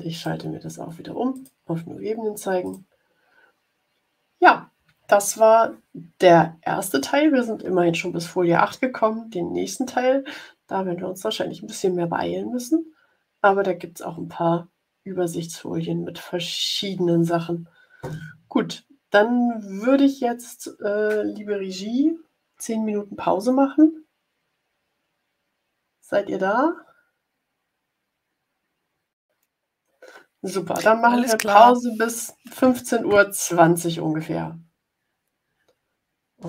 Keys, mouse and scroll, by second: 0.1 click, 1.2 click, 2.6 click.